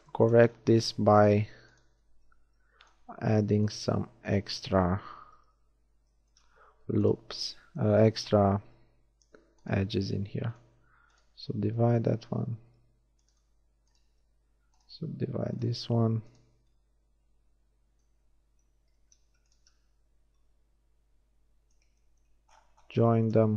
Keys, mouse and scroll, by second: 2.3 w, 5.6 j, 7.0 shift+click, 10.1 shift+w, 11.8-13.2 drag, 15.0 w, 16.7-18.6 drag, 16.7-18.0 right drag, 19.0 ctrl+z, 19.6-21.8 drag, 20.4 right click.